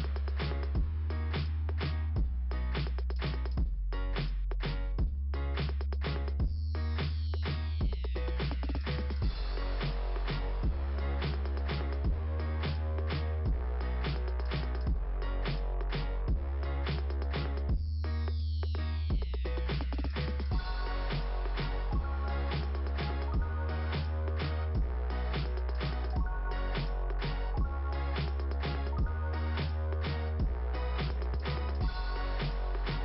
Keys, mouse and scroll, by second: 5.4 click, 6.3 click, 10.1 click, 13.2-13.9 scroll down 3, 15.3 scroll down 2, 16.8 click, 18.9 click, 20.7 click, 22.8 click, 24.5 click, 29.0 click, 30.3 click, 32.5 click.